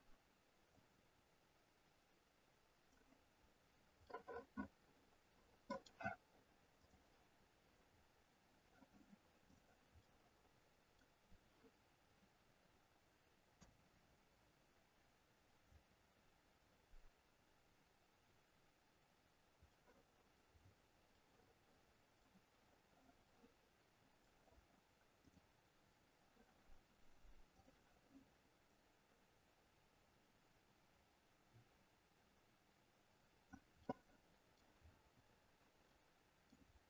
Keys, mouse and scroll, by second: 7.1 click, 8.1-9.5 scroll down 3, 9.5 click, 10.2 middle click, 13.7 KP_0, 16.2-16.8 scroll up 4, 17.4-18.3 scroll up 1, 18.3-18.9 scroll down 1, 19.9 middle click, 19.9 scroll down 3, 20.6-21.1 scroll down 3, 21.3 middle click, 25.1 click, 27.4 click, 33.9 middle click, 34.9 scroll up 5, 36.0 middle click.